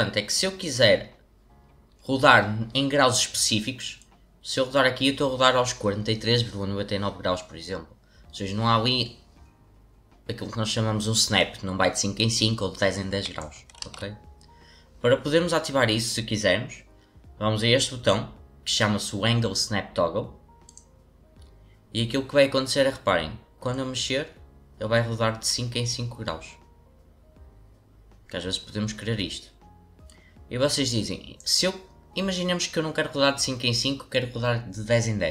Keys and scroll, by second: 13.8 ctrl+z.